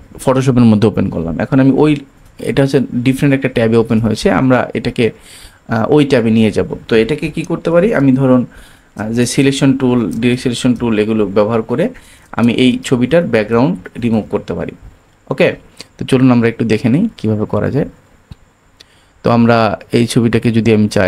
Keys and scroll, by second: 7.9 shift+super+space.